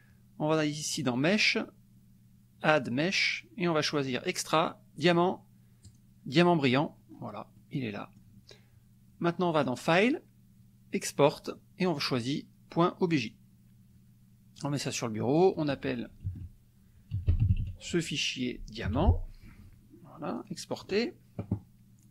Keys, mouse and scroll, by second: 0.9 click, 5.8 click, 6.7-7.3 scroll up 1, 7.5 middle click, 9.5 click, 13.2 click, 14.5 click, 16.2 ctrl+a, 16.8-18.9 typing, 20.3 click.